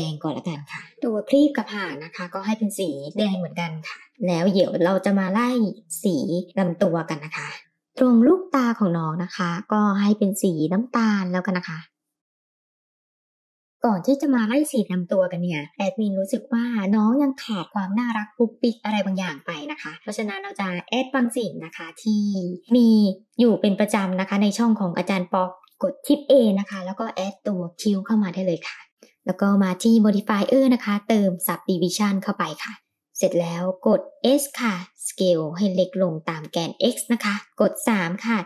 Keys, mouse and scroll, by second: 1.1 ctrl+z, 1.7-2.2 middle drag, 2.5 click, 3.6 click, 4.1-5.2 drag, 5.7-6.2 middle drag, 7.6 shift+middle click, 7.8 click, 8.1 click, 8.8 click, 12.1 click, 14.4 click, 15.2-15.6 middle drag, 16.0-18.0 middle drag, 18.3 shift+s, 21.0 shift+a, 29.6 click, 30.2-32.5 drag, 32.9-33.4 scroll down 2, 33.4-33.8 middle drag, 34.4 s, 37.9 middle drag.